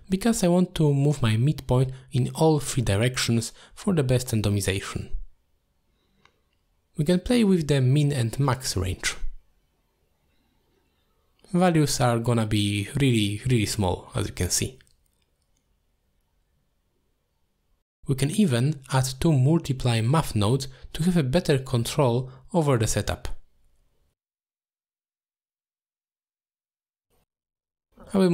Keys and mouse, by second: 0.4 middle click, 2.7-4.9 drag, 6.1-9.3 drag, 10.4-14.6 drag, 15.3 click, 16.0-19.0 drag, 20.7 middle click, 21.4 shift+a, 24.4-26.1 drag, 27.1 click, 27.6 click, 28.1 click.